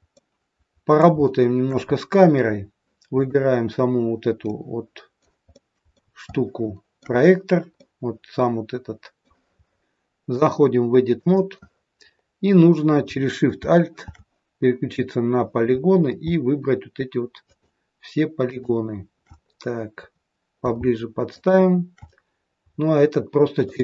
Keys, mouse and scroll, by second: 0.1 middle click, 1.1 shift+middle click, 1.8-2.7 scroll up 10, 3.1 click, 4.3 middle click, 5.4 middle click, 6.2 shift+middle click, 7.7 middle click, 10.3 click, 12.1-13.0 scroll up 2, 13.0-13.4 scroll up 1, 17.3 alt+shift+click, 18.3 alt+shift+click, 19.3-20.5 scroll up 6, 20.5-21.1 scroll up 2, 21.1 alt+shift+click, 23.6 shift+click.